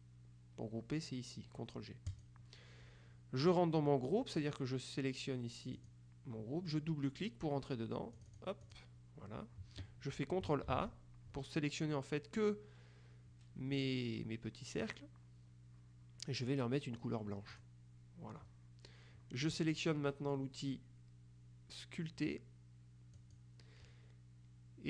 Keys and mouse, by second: 2.2 click, 5.9 click, 8.3 click, 10.8 ctrl+a, 17.6 click, 23.3 click.